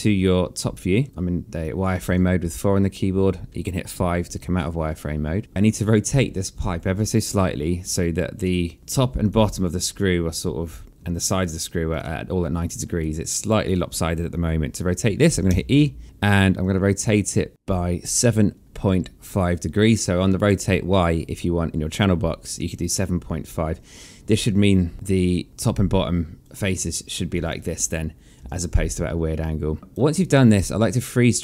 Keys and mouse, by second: 1.0 4, 2.6 5, 5.1 alt+middle click, 9.2 click, 9.8 shift+click, 11.8 shift+click, 13.6 right click, 14.2 click, 16.0 e, 17.2 click, 26.4 right click, 26.8 click, 27.6 shift+click, 28.6 w, 29.8 right click, 30.3 click.